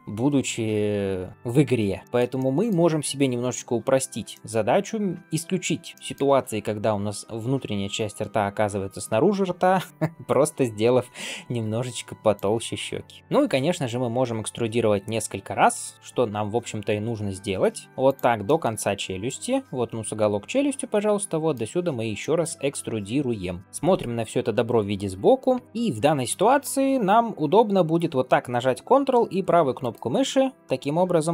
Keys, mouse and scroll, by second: 2.0 shift+middle click, 2.0 scroll down 1, 2.2 middle click, 3.2 KP_7, 4.2 shift+middle click, 4.6-5.6 scroll up 2, 5.9 shift+middle click, 13.2 shift+middle click, 13.2 scroll up 2, 13.5 e, 18.3 shift+middle click, 19.1 middle click, 20.8 middle click, 22.1 shift+middle click, 22.6-23.6 middle drag, 23.6 scroll down 1, 23.7 shift+middle click, 25.5 ctrl+KP_3, 29.7 ctrl+right click.